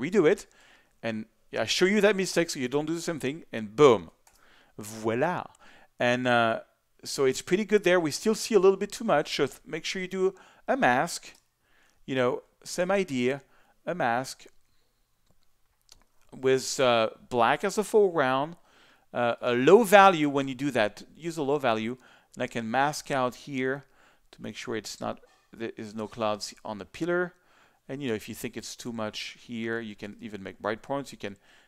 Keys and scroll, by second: 4.3 super+d, 11.3 b, 17.7 x.